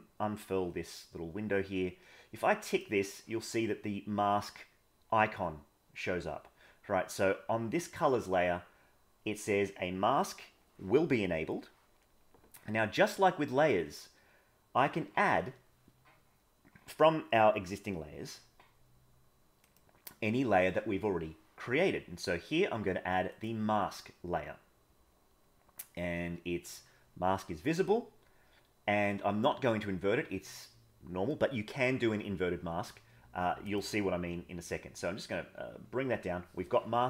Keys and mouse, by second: 2.6 click, 19.6-23.5 drag, 33.6 click.